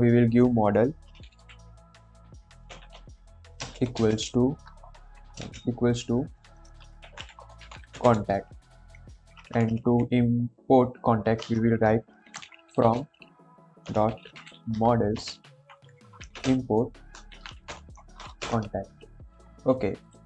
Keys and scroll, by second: 0.9-5.3 typing, 6.7-8.4 typing, 8.8 Escape, 9.1 Up, 9.3 Up, 9.4 Up, 11.2 End, 11.3 Return, 12.1-18.3 typing, 18.3 Return.